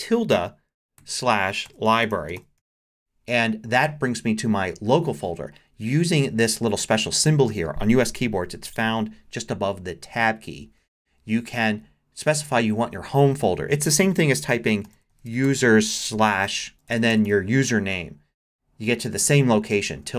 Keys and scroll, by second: 1.0-3.1 typing, 14.3-17.7 typing.